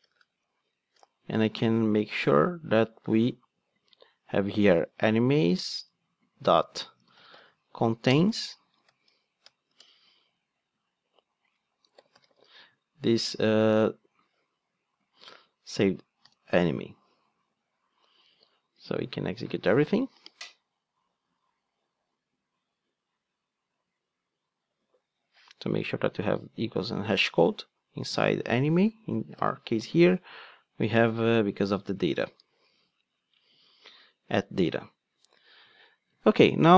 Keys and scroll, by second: 8.1 Return, 8.8 alt+shift+Right, 13.6 super+c, 15.2 super+v, 18.9 ctrl+d, 29.4 super+b, 32.6 ctrl+Tab.